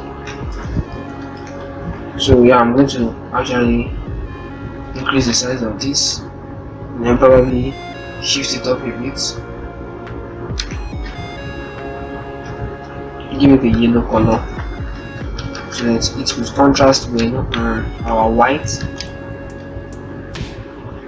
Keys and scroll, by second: 0.4 ctrl+Return, 5.6 shift+Up, 6.0-10.4 typing, 7.0 shift+Up, 10.6 Up, 14.1 ctrl+Return, 15.2 ctrl+-, 15.5 0, 16.7 ctrl+-, 19.3 ctrl+shift+t.